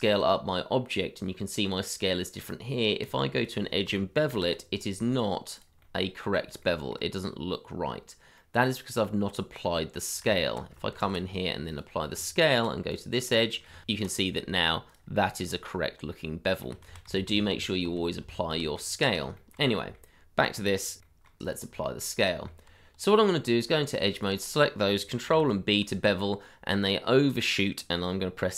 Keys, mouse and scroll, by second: 2.4 Tab, 4.3 ctrl+b, 5.8 middle click, 6.6 shift+middle click, 7.2 scroll up 1, 8.4 middle click, 10.2 Tab, 10.9 ctrl+a, 12.1 Tab, 13.2 middle click, 13.8 ctrl+b, 15.2 shift+middle click, 16.2 middle click, 16.8 ctrl+z, 18.9 scroll down 1, 19.9 middle click, 21.0 shift+middle click, 21.5 ctrl+a, 22.2 shift+middle click, 22.5 middle click, 22.7 Tab, 24.2 shift+click, 25.2 ctrl+b.